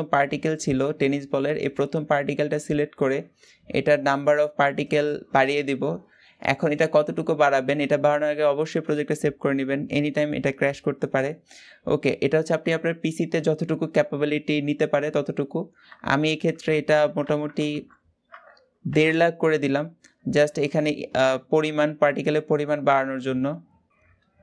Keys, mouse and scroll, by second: 4.6 click.